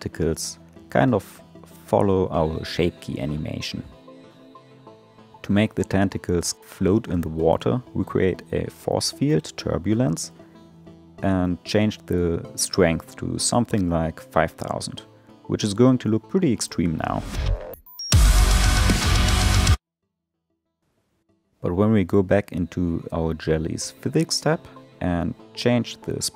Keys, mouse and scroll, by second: 0.6 space, 6.0 click, 7.8 shift+a, 13.7 space, 14.9-17.0 drag, 17.0 0, 17.1 0, 19.7 space, 21.2 click, 24.0-26.3 drag.